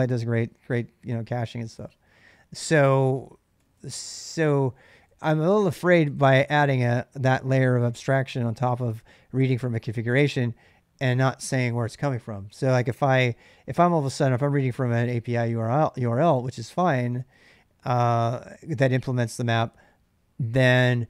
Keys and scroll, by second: 3.1-6.0 typing, 12.3 k, 12.5 k.